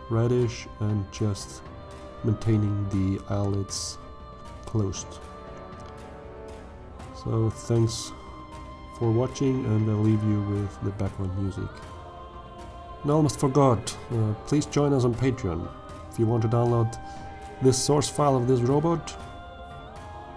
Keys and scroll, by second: 14.5 alt+a.